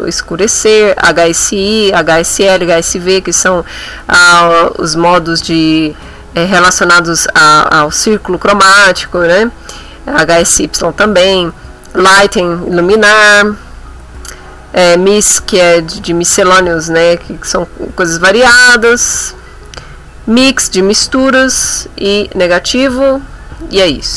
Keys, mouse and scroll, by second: 0.3 scroll down 2, 2.5-2.8 scroll down 2, 9.0-9.7 scroll down 4, 10.5-10.8 scroll down 2, 13.3-13.7 scroll down 2, 17.2-17.6 scroll down 2, 18.9-19.6 scroll down 2, 21.1 scroll down 1, 22.7-23.0 scroll down 1.